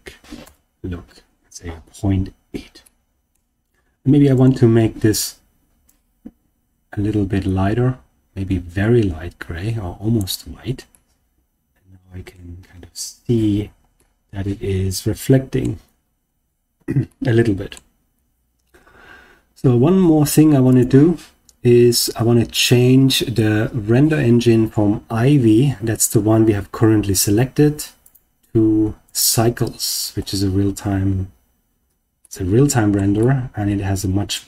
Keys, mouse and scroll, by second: 2.8-3.3 middle drag, 4.3 click, 10.8-12.3 middle drag, 12.5-13.2 scroll up 2, 13.2 scroll down 2, 13.9-15.6 middle drag, 17.0-17.7 middle drag, 20.6 click, 27.9-29.3 drag, 32.1 middle click, 33.1-34.4 shift+middle drag.